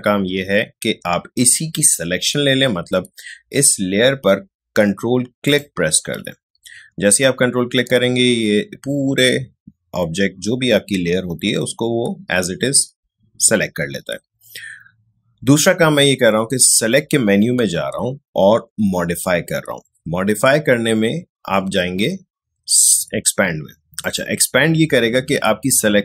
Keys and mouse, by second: 24.0 click.